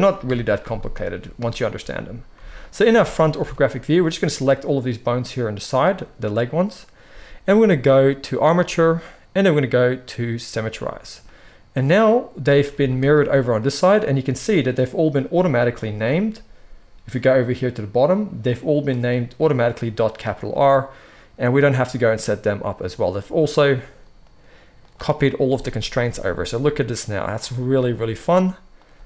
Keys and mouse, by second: 0.2 KP_1, 0.7 shift+click, 1.1-4.0 middle drag, 2.3 z, 3.3 alt+a, 4.0-14.5 drag, 12.6 z, 14.5-15.7 middle drag, 15.7 click, 15.9-17.1 middle drag, 17.1 click, 17.2-20.0 middle drag, 20.0 click, 20.1-24.1 middle drag, 24.1-25.6 drag, 25.6-28.7 middle drag, 25.9 g, 27.8 g, 28.7 click, 28.8-29.0 middle drag, 28.8 g.